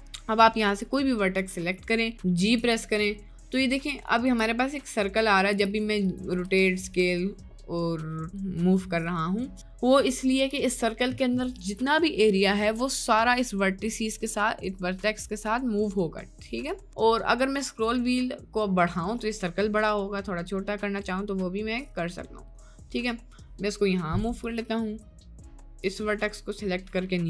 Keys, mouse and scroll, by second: 1.6 middle click, 2.1 click, 2.6 g, 4.4 g, 5.6 g, 6.5 r, 6.9 s, 9.6 g, 10.4 g, 25.0 middle click, 26.4 middle click.